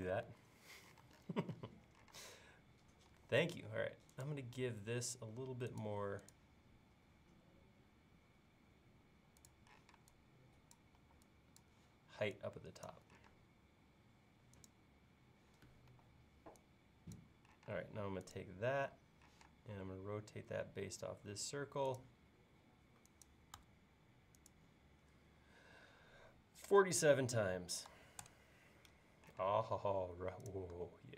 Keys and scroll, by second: 0.3 super+z, 2.1 space, 9.8 p, 11.0 e, 13.3 space, 15.9 e, 17.7 space, 19.3 q, 26.3-27.9 typing, 28.3 Return, 29.4 space.